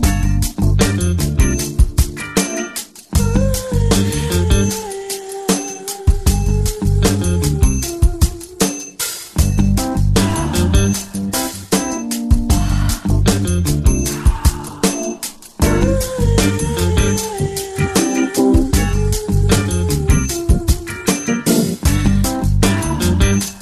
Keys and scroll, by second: 0.7 alt+super+space, 4.0 space, 4.5 space, 7.8 Return, 14.8 ctrl+j, 18.1-19.0 typing, 19.2 Return, 21.0-22.2 typing, 22.9 Return.